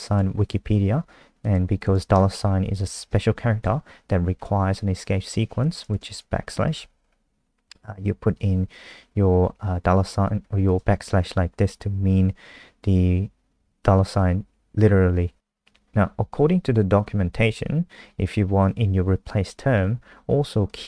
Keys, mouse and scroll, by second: 2.7 Right, 2.8 Right, 3.1 shift+Left, 3.6 Left, 6.0 shift+Left, 10.6 click.